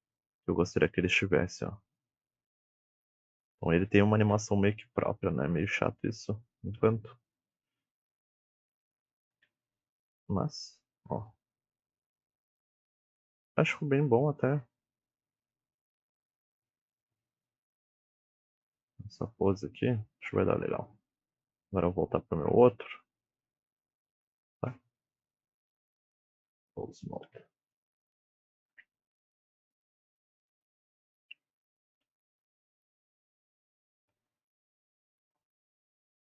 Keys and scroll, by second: 2.6 g, 4.2 KP_3, 6.9 g, 9.2 KP_1, 25.1 ., 26.7-27.6 typing, 29.9 g, 30.7 ctrl+Tab, 31.3 g, 33.3 ctrl+Tab, 33.7 r, 35.5 s, 36.0 r.